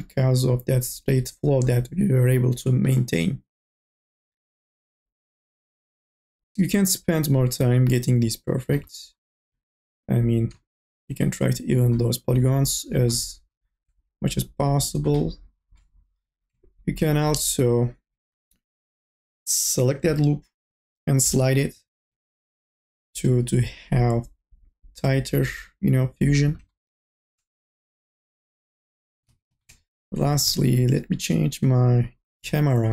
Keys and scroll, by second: 3.7 1, 15.6 q, 17.8 2, 18.3 q, 19.7-22.0 typing, 26.7 n, 29.3 ctrl+z.